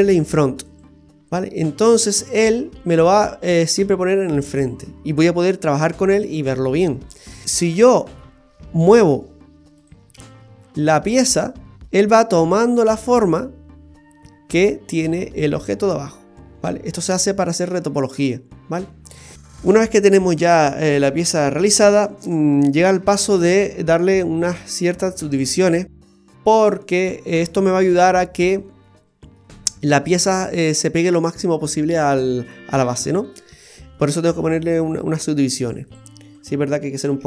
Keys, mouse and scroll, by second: 0.7 click, 1.6 middle click, 3.0 middle click, 5.2 middle click, 9.1 d, 9.8 click, 10.1 g, 20.6 middle click, 23.0 Tab, 24.4 ctrl+r, 26.1 ctrl+r, 28.8 middle click, 32.7 middle click, 33.6-34.1 scroll up 2, 33.9 shift+middle click, 35.6 ctrl+r, 37.0 ctrl+r.